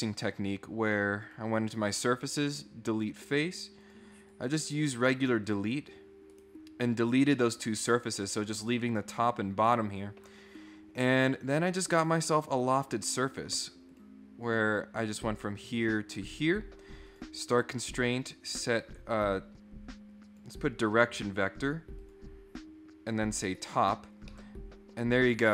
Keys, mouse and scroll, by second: 1.3 click, 2.4 click, 3.8 click, 4.2 click, 5.0 click, 5.5 click, 6.3 right click, 7.3 middle click, 11.4 click, 12.2 middle click, 13.9 click, 15.1 click, 17.0 click, 17.9 click, 20.2 click, 22.0 click, 23.1 click, 24.3 middle click.